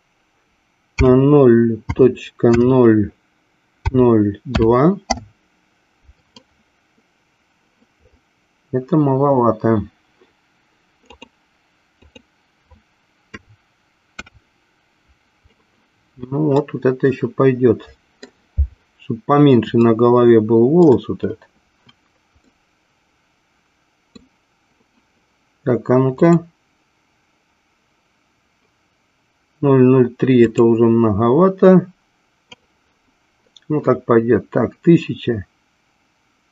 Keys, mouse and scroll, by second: 11.1-15.6 drag, 16.5-18.5 middle drag, 20.1-21.3 shift+middle drag, 22.8-24.6 middle drag, 26.1 click, 30.2 click.